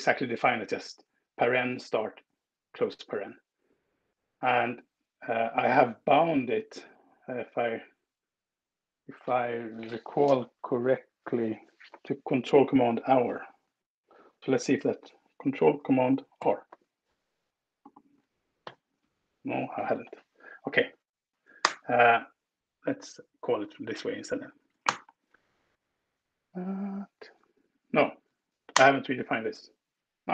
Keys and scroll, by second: 12.9 Escape, 16.2 ctrl+super+r, 18.4 ctrl+super+r, 21.5 ctrl+alt+space, 23.1 Down, 23.2 Down, 23.4 Down, 23.7 Down, 23.9 Down, 24.7 Return, 28.6 alt+Return.